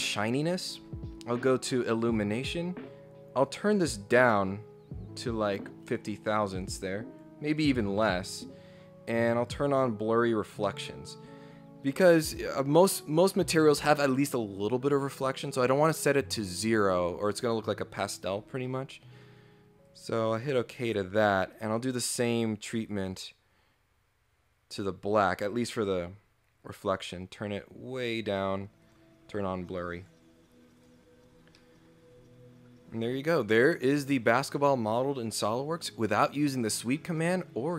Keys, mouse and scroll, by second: 0.4-1.0 scroll up 2, 1.8 click, 3.4 click, 6.3 click, 8.1 scroll down 4, 9.4 click, 10.4 scroll up 2, 10.7-12.0 middle drag, 19.8 click, 20.4 click, 21.5 right click, 22.9 click, 25.1 click, 26.9 click, 27.9 click, 28.8 click, 30.0 click, 30.8 click, 31.2 scroll down 2, 31.5 middle click, 31.9 scroll up 2, 32.2 scroll down 2.